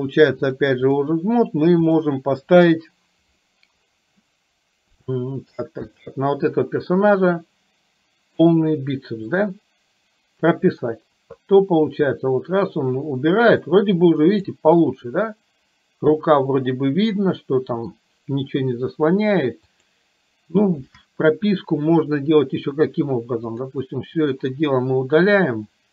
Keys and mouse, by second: 0.6-1.1 drag, 2.0 click, 5.3 shift+middle click, 6.0 click, 7.7 click, 9.5 click, 12.0-14.6 drag, 15.1-18.1 middle drag, 19.8 click, 23.6 click.